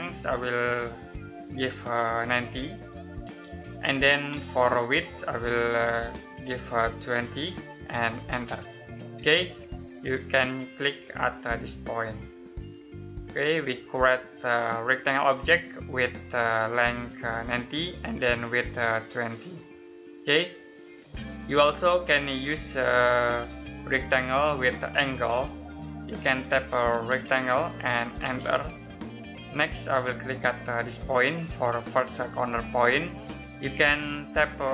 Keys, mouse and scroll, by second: 2.0-2.9 typing, 4.2 space, 6.4-7.0 typing, 8.2 space, 11.8 click, 12.6 middle click, 13.2 scroll up 1, 14.7 middle click, 19.8 scroll down 1, 20.3 middle click, 25.8 middle click, 26.3-28.1 typing, 31.3 click.